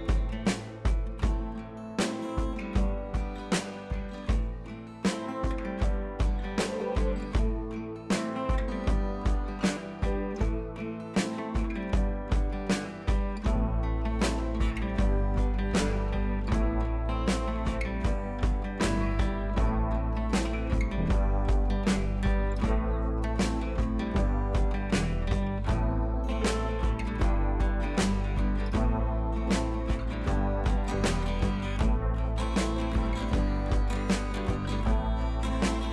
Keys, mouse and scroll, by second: 0.8-3.3 drag, 1.3-2.5 drag, 3.3-4.1 shift+drag, 5.3-5.7 shift+drag, 6.9 ctrl+[, 7.5-8.2 click, 8.3 right click, 8.9-10.3 drag, 10.8-11.3 shift+drag, 15.4-17.0 drag, 21.5-22.7 drag, 24.8-25.3 scroll down 2, 25.9-26.5 shift+click, 26.7-27.1 scroll up 2, 27.3-28.1 alt+drag, 28.9 shift+drag, 31.1 right click, 32.1 click, 33.0-33.5 shift+drag.